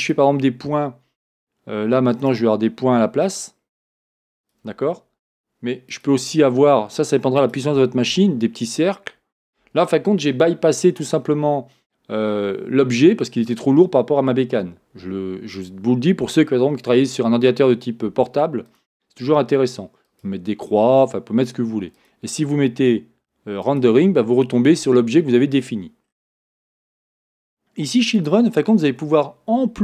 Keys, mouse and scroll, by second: 3.3-4.3 drag, 4.7-6.0 drag, 18.7 click, 20.3-26.0 drag, 26.1 scroll down 1, 28.2 click, 28.7-29.8 scroll down 1.